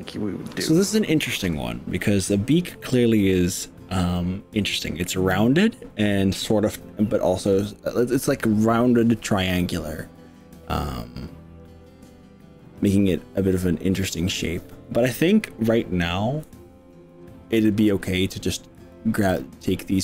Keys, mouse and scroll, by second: 18.9 click, 19.4 click.